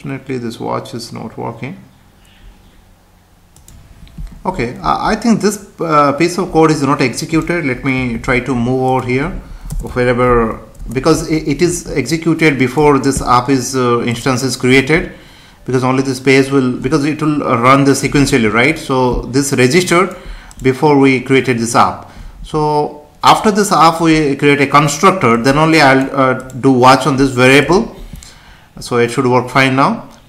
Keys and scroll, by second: 3.7 F5, 8.1 ctrl+x, 9.7 Return, 10.3 ctrl+v, 10.8 Return, 13.2 Tab.